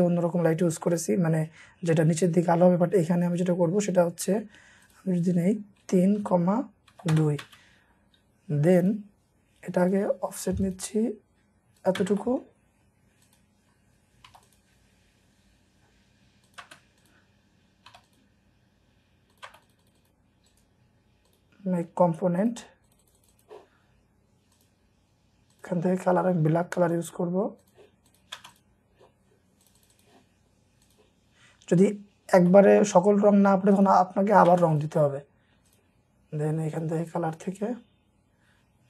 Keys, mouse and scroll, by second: 4.2 Escape, 6.0-7.4 typing, 7.1 Return, 8.0-8.5 scroll up 1, 12.0 space, 12.1 scroll up 1, 12.2 middle click, 14.3 typing, 16.8-17.6 scroll up 2, 16.8-17.9 typing, 19.8 double click, 20.5 right click, 21.6-22.1 scroll down 1, 22.8 double click, 24.9 scroll up 1, 25.8-26.9 scroll down 1, 26.9-27.7 scroll up 1, 28.1 double click, 28.4 space, 29.8 double click, 31.9-32.5 scroll down 1, 32.5 middle click, 34.5 space, 35.9-37.0 scroll up 1, 37.0-37.4 scroll down 1, 38.0-38.4 scroll up 1.